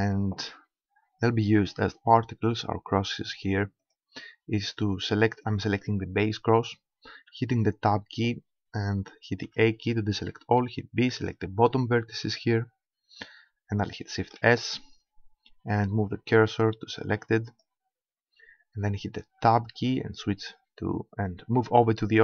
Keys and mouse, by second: 3.8-5.6 right drag, 7.2 Tab, 9.4 a, 10.5 b, 14.4 shift+s, 19.3 Tab.